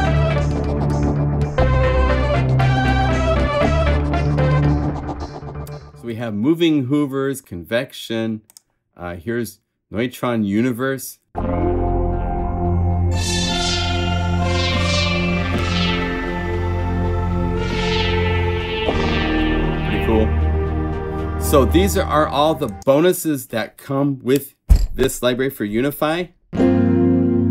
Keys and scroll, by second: 4.1 F4, 11.3 F1, 11.4 F2, 13.4 F4, 26.5 F3, 26.6 F4.